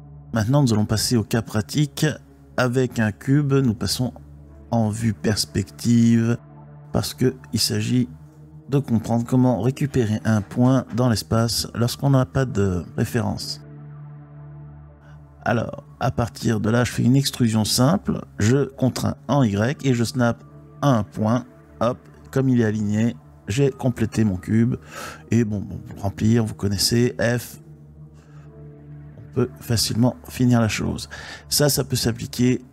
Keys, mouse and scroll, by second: 1.4-4.0 drag, 4.6-5.4 middle drag, 6.8 Tab, 7.5 click, 9.2 x, 14.5 e, 16.4 y, 19.9 click, 21.6 click, 22.4 shift+click, 23.6 f, 24.6 shift+click, 25.1 shift+click, 25.7 f, 27.1 shift+click, 27.9 f, 28.1 f, 28.3 f, 28.4 f, 30.1-32.1 middle drag.